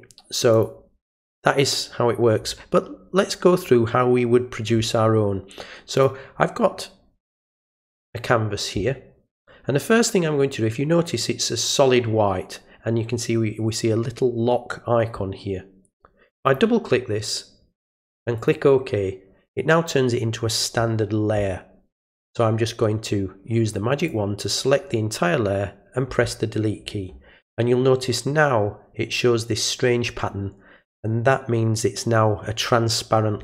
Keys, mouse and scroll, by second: 0.5 click, 6.0 click, 16.3 click, 16.5 click, 18.4 click, 22.0 click, 24.0 click.